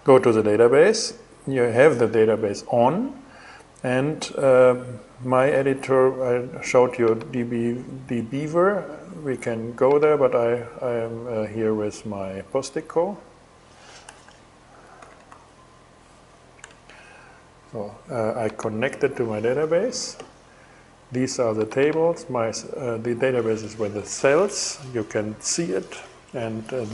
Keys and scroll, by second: 13.4-14.9 typing, 15.9 super+c, 16.2 super+o.